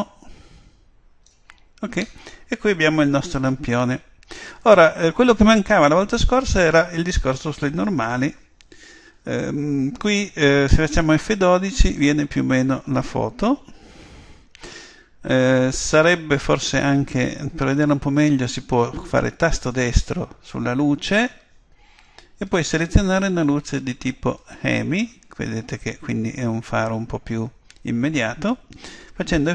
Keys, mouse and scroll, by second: 1.9-5.1 middle drag, 13.4 F12, 13.4 Escape, 19.7-21.6 right drag, 22.5 click, 24.4 click.